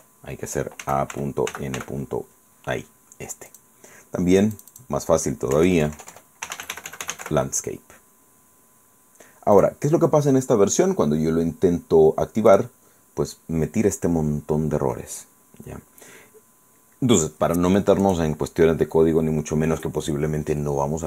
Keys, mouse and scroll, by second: 0.6-2.0 typing, 3.5 click, 4.6 click, 5.6-7.8 typing, 9.6 click, 12.5 click, 18.0 click.